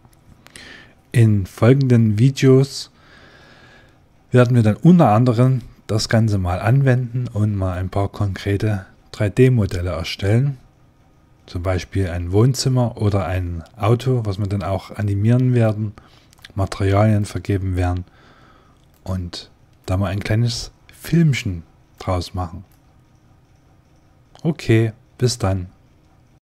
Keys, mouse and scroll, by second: 4.7-9.4 middle drag, 9.4-13.6 middle drag, 15.5-23.7 middle drag.